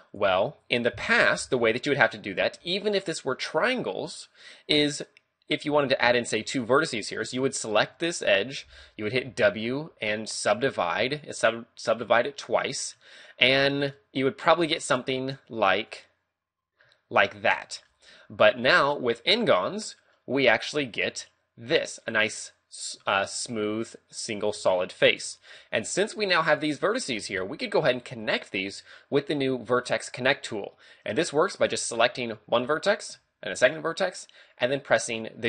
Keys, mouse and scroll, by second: 1.4 d, 1.8 right click, 1.9-2.3 d, 2.3 right click, 2.5 d, 2.6 d, 7.5 right click, 8.2 shift+right click, 9.2 w, 13.0 middle click, 14.9 click, 15.9 click, 16.8 middle click, 17.6 shift+middle click, 18.0-18.4 scroll up 3, 18.9 middle click, 21.1 click, 23.0 a, 25.2 shift+middle click, 26.0 right click, 26.5 shift+right click, 26.9 right click, 27.4 a, 31.9 right click, 33.6 shift+right click.